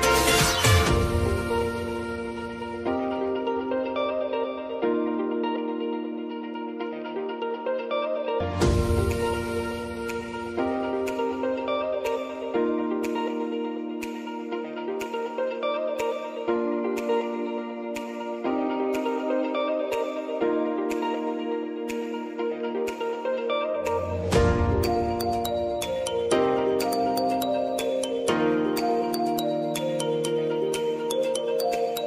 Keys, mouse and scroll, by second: 0.1 shift+click, 0.7 ctrl+v, 1.3 u, 1.8 space, 3.8 space, 4.2 click, 4.9-5.5 scroll up 1, 5.5 click, 6.1 scroll down 1, 7.6 Page_Down, 8.3 click, 8.8 [, 9.3 Page_Down, 10.5 click, 10.8 [, 11.4 Page_Down, 11.7 scroll up 1, 12.8 click, 14.0 [, 14.4 Page_Down, 15.1 click, 15.8 [, 16.2 Page_Down, 16.5 scroll up 1, 17.3 click, 17.9 [, 18.5 click, 19.2 u, 20.4 space, 22.4 space, 25.9 typing, 26.7 click, 27.8 space.